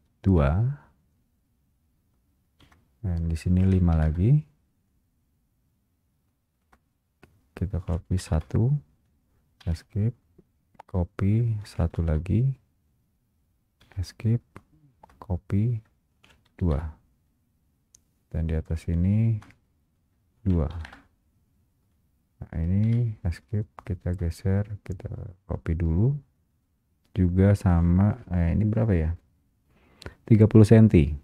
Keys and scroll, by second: 0.6 Return, 4.2 Return, 9.8 Return, 9.8 Escape, 12.2 Return, 14.0 Return, 14.0 Escape, 16.8 Return, 19.4 Return, 21.0 Return, 23.0 Escape, 24.2 Escape.